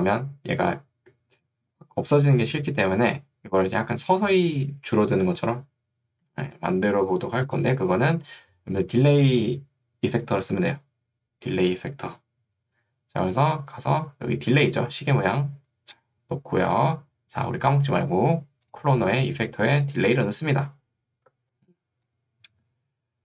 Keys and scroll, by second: 21.5 ctrl+2, 22.9 Escape.